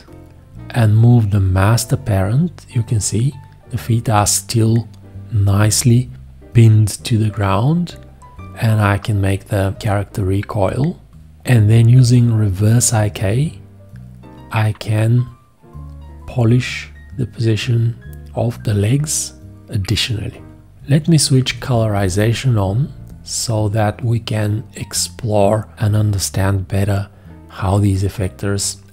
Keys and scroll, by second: 21.4 shift+g.